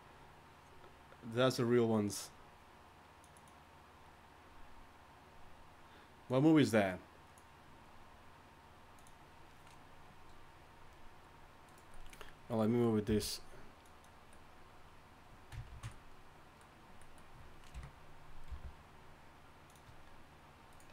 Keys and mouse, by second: 13.1 g, 15.7 ctrl+z, 17.7 KP_1, 18.5 g.